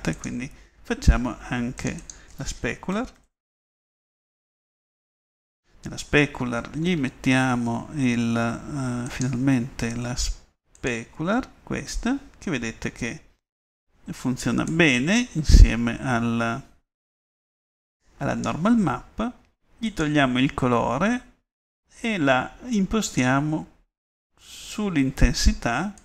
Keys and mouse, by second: 10.5 click, 11.0-15.8 middle drag.